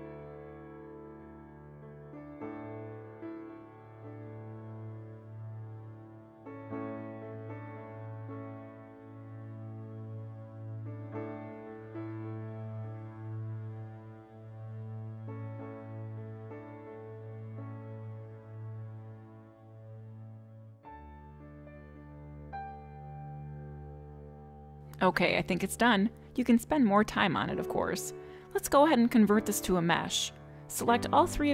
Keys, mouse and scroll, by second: 24.0 click, 24.0 scroll down 1, 25.6 middle click, 29.6 click, 31.4 shift+click.